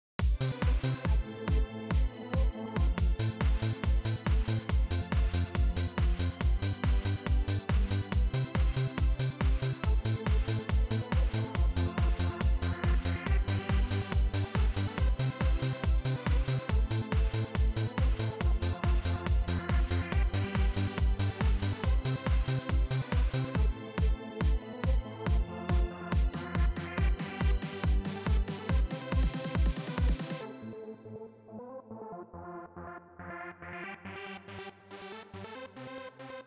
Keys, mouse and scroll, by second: 2.7 click, 16.5 right click, 17.4 click, 18.5-19.8 typing, 21.3 BackSpace, 25.0-25.9 typing, 27.2 right click, 28.0 click, 29.1 click, 30.3 click, 31.6 Return, 33.3 click, 34.3 click, 35.5 click.